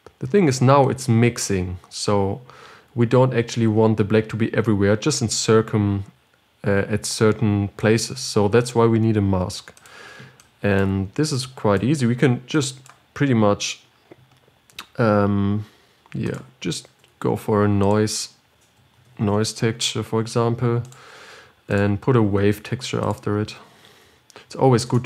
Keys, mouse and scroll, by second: 1.5-4.2 drag, 10.8-25.0 drag.